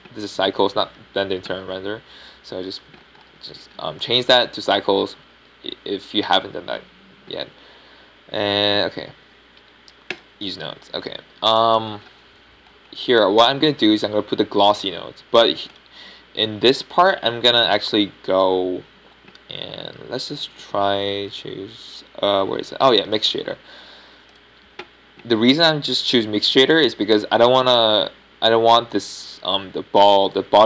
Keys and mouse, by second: 5.0-8.2 middle drag, 12.0-13.8 drag, 13.8-17.6 middle drag, 17.6-30.6 drag.